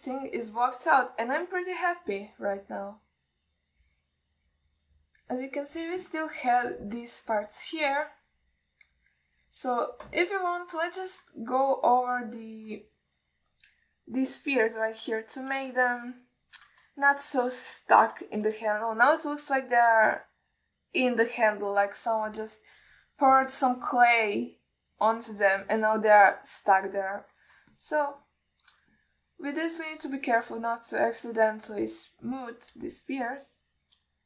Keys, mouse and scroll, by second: 0.5 alt+middle click, 1.4 alt+shift+middle click, 5.9 alt+middle drag, 11.8-12.4 alt+scroll up 1, 12.4 click, 12.7-13.2 alt+scroll up 1, 13.2 drag, 15.9 middle click, 16.5-16.9 alt+shift+middle drag, 17.2-17.7 ctrl+alt+middle drag, 18.3-18.7 alt+shift+middle drag, 19.0-19.4 ctrl+middle drag, 20.2 alt+shift+middle drag, 20.8-23.4 middle drag, 25.0-25.5 middle drag, 26.3-28.5 middle drag, 29.0 alt+shift+middle drag, 29.5-29.8 middle drag, 30.2 ctrl+middle click, 31.0 click, 31.7 middle click, 32.2 f, 33.1 ctrl+middle click, 33.6 alt+middle click, 34.1-34.2 shift+drag.